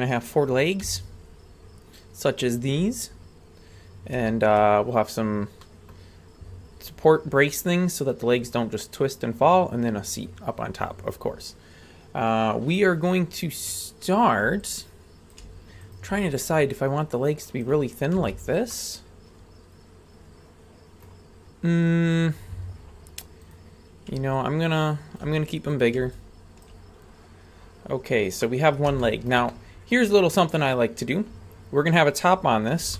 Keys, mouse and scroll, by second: 0.9 a, 2.4 scroll down 2, 3.0 scroll down 2, 3.6-4.1 scroll down 2, 4.3 shift+middle click, 5.6-6.0 middle drag, 13.1-13.8 scroll up 2, 13.8 right click, 14.6 ctrl+click, 15.9 right click, 16.4-17.8 ctrl+drag, 18.2 a, 18.7-21.1 middle drag, 21.5-22.0 scroll down 4, 22.5-23.5 scroll up 2, 23.5-24.1 right drag, 23.5-24.1 scroll up 1, 24.4 ctrl+click, 25.8 right click, 26.2 ctrl+click, 28.0 scroll up 2, 28.4-28.8 middle drag, 29.0-29.3 shift+middle drag, 29.5 middle click, 30.6-32.3 right drag, 32.4 scroll up 2.